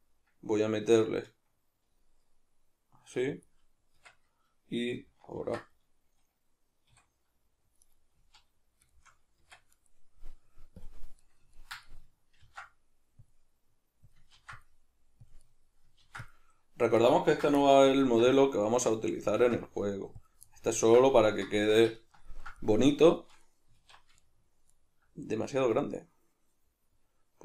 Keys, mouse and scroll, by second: 3.4 click, 3.9 Tab, 5.4 ctrl+2, 6.9 a, 7.9 right click, 8.2 z, 8.9-10.8 shift+middle drag, 9.4 Tab, 10.8 click, 11.2-14.1 middle drag, 12.4 ctrl+r, 14.1 click, 14.3 ctrl+r, 15.3 click, 15.4 middle click, 16.0 ctrl+r, 17.1 right click, 17.3 ctrl+z, 17.6 middle click, 18.1 ctrl+r, 19.2 click, 19.3 ctrl+r, 20.3 drag, 20.5-21.6 ctrl+middle drag, 21.6 Tab, 22.6-23.8 middle drag, 23.8 alt+q, 24.2-27.4 ctrl+middle drag.